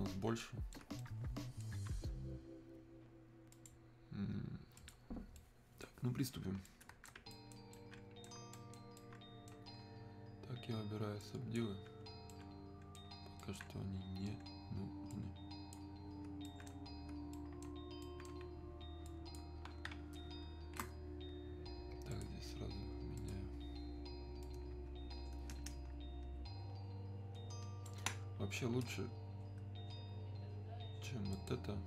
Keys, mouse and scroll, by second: 3.5 click, 5.4-11.2 right drag, 11.2 click, 12.3 alt+right click, 15.1-16.5 drag, 16.5 alt+right click, 19.1 ctrl+click, 24.7-31.3 ctrl+drag, 31.3-31.8 ctrl+drag.